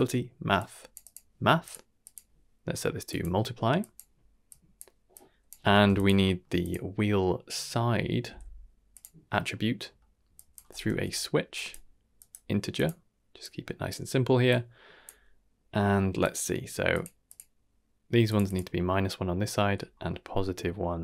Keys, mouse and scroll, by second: 2.0-3.2 drag, 3.8 click, 4.5 click, 5.1 click, 5.7 shift+d, 6.2 middle click, 6.6-9.0 drag, 9.3 middle click, 9.8 middle click, 10.3-11.7 drag, 12.1-12.8 drag, 13.4-13.9 drag, 14.4-15.0 drag, 16.2 click, 16.9 click, 17.2 click, 18.2 click, 18.4 click, 19.8 scroll down 2, 20.1 middle drag, 20.6 shift+middle drag.